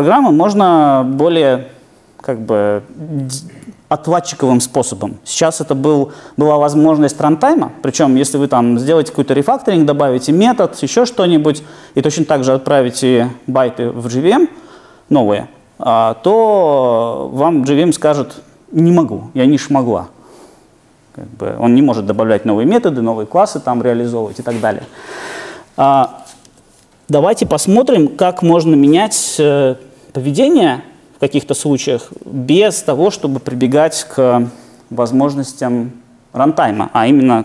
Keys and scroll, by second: 26.5 super+e.